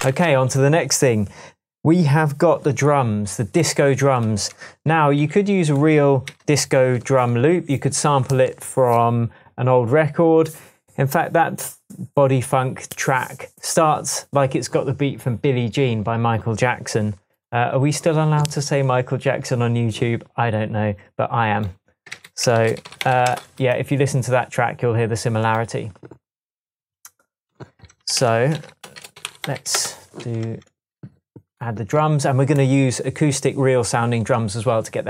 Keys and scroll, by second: 0.1 super+s, 4.9 shift+super+t, 6.3 super+r, 22.1-23.6 typing, 28.2-30.1 typing, 30.5 Tab.